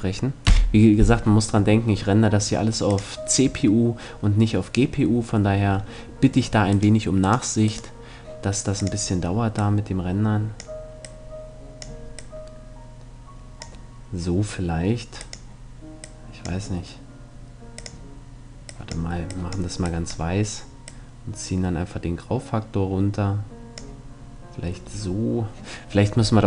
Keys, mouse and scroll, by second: 0.0 F11, 0.0 click, 2.0-4.2 middle drag, 2.5-4.4 drag, 6.0 middle click, 6.4-9.2 right drag, 8.4-10.3 drag, 14.8-16.5 drag, 17.4-19.3 drag, 25.1-26.4 middle drag.